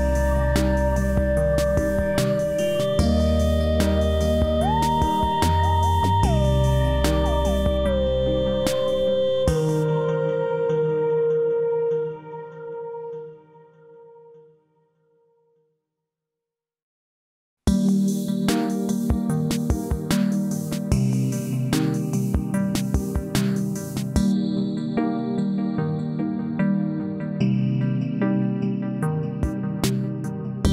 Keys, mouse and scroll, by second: 11.4 s, 12.0-12.3 scroll down 1, 14.7 click, 18.6 click, 22.1 click, 25.7 click, 26.2 scroll down 1, 27.0 e, 27.8-29.4 drag.